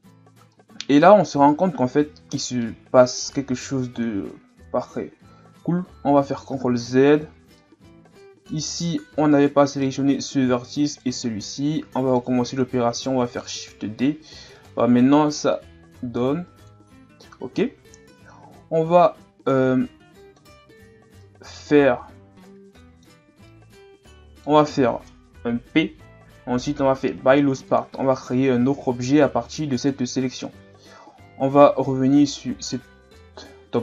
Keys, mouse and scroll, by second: 1.5-2.6 drag, 2.6-5.6 middle drag, 6.2 ctrl+z, 6.7 ctrl+z, 7.6-9.3 middle drag, 9.3 shift+right click, 10.0 middle click, 10.9 shift+right click, 11.6-13.4 middle drag, 13.4 shift+d, 15.6-17.5 drag, 17.5 KP_1, 18.6-19.2 scroll up 2, 19.2-19.6 scroll down 2, 19.6-20.9 middle drag, 20.9-21.2 scroll up 1, 21.2-25.6 middle drag, 25.6 p, 28.7 Tab, 29.8 right click, 30.9 Tab, 32.6 alt+right click, 33.1-33.8 middle drag.